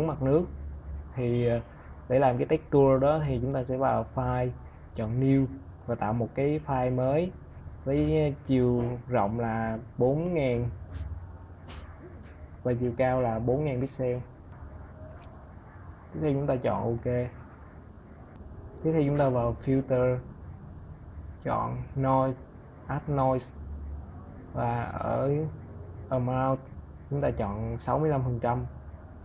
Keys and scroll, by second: 17.7 v.